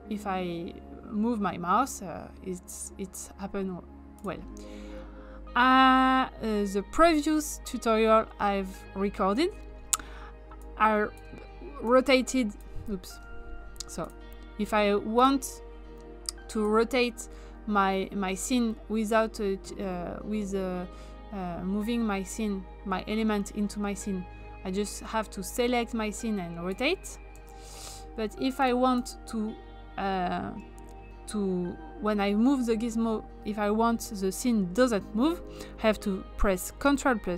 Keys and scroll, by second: 13.1 ctrl+z, 27.3 ctrl+z.